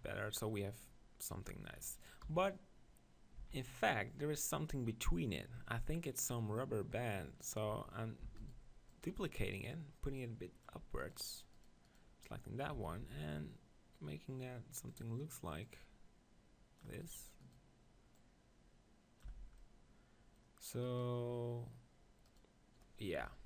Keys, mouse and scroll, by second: 0.0 click, 0.9-2.6 middle drag, 2.2 KP_1, 3.4 z, 8.2 shift+d, 8.9-12.1 drag, 12.7 s, 15.6-17.4 drag, 18.1-20.0 drag, 19.3 z, 19.6-21.6 middle drag, 20.9-23.2 right drag, 23.2 KP_1.